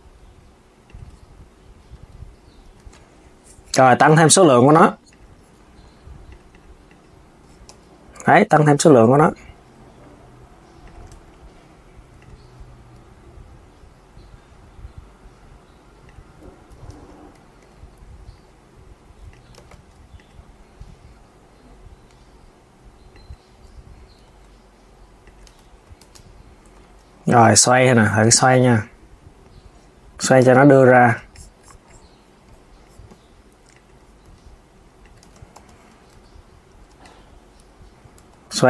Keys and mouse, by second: 2.4 Tab, 4.2 click, 4.8 click, 6.0-7.4 drag, 7.4 KP_1, 8.2 click, 10.6 click, 10.8 Tab, 11.9 click, 12.6 s, 16.6 KP_1, 17.3 g, 19.3 z, 19.9 click, 20.9 s, 25.7 z, 26.3 Tab, 27.1 click, 27.9 r, 30.1 KP_3, 30.7 click, 33.4 click, 34.0-36.8 typing, 38.3 r.